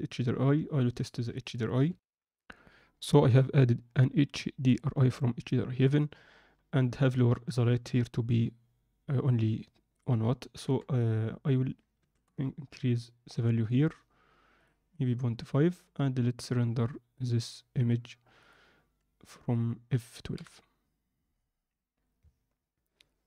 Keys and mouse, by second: 1.8 ctrl+F9, 2.1 ctrl+F10, 6.0-7.2 drag, 9.9-12.1 drag, 17.2-20.4 drag.